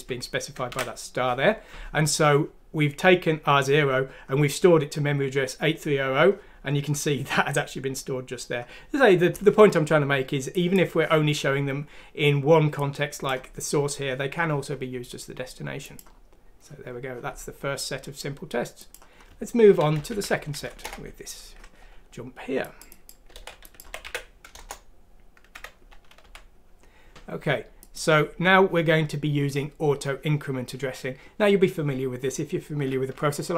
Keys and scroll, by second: 1.6 alt+Tab, 20.0 Home, 23.3 ctrl+c, 23.8 ctrl+f, 24.0 ctrl+v, 24.5 Return, 25.5 Escape, 26.2 F3.